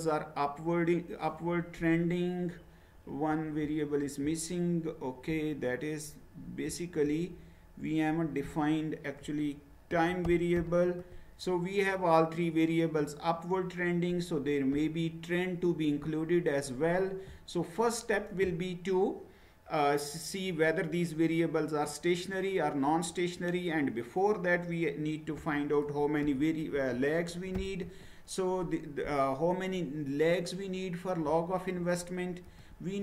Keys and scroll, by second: 9.2-11.1 typing, 25.3-27.7 typing, 32.5 Return.